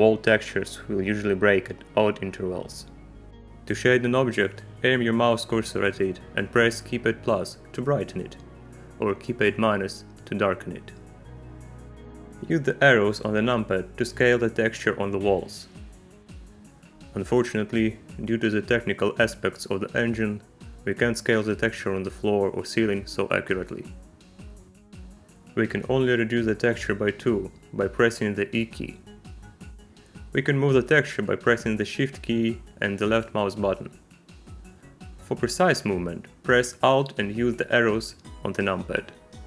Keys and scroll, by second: 7.1 -, 9.3 -, 15.0 KP_6, 15.7 KP_2, 16.7 KP_6, 18.0 KP_2, 18.6 KP_6, 28.0 e, 38.5 alt+KP_4, 38.8 KP_6.